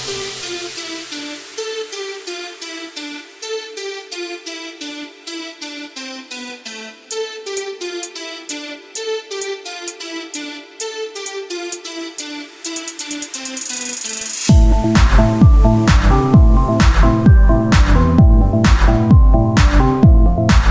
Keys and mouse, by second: 1.4-5.2 drag, 1.4-4.4 right drag, 4.5 right click, 5.2 middle click, 6.0-7.6 drag, 10.8 Tab, 12.3 Tab, 13.2-16.1 drag, 16.1-18.3 right drag, 18.3-20.2 drag, 18.9-20.0 right drag.